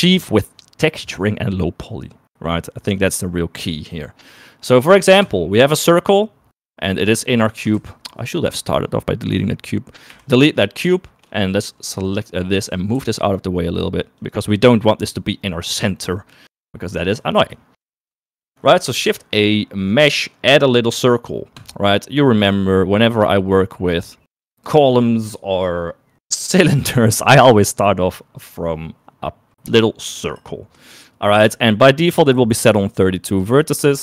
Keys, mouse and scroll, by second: 8.4 ctrl+z, 9.4 click, 10.7 typing, 11.6 shift+middle click, 12.6 click, 13.2 g, 18.0 shift+middle click, 18.4 middle click, 19.6 shift+a, 23.5 click.